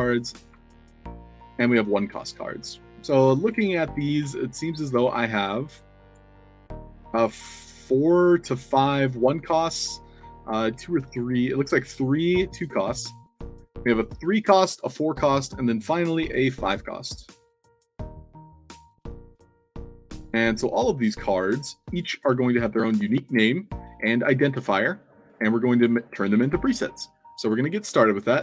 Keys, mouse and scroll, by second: 0.2 click, 0.8 shift+click, 1.6 click, 2.1 drag, 2.9 shift+drag, 3.2-4.2 typing, 3.3 click, 4.6 click, 5.7-6.3 shift+drag, 6.6 click, 8.0 shift+click, 9.7-11.2 typing, 11.1 click, 13.3 click, 13.8 click, 14.6 click, 15.3 click, 16.2 o, 17.3-18.8 shift+drag, 20.1-21.3 shift+drag, 20.2 shift+d, 21.6 click, 22.2 a, 23.1 click, 24.0 shift+click, 24.9 click, 25.6 click, 27.3 click, 28.0-28.4 alt+drag.